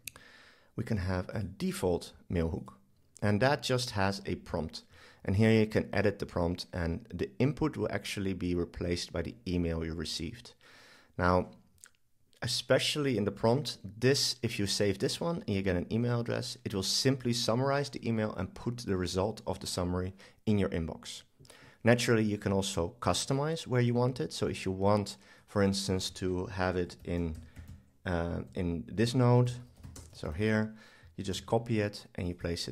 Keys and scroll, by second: 28.4 shift+super+Left, 31.3 super+c.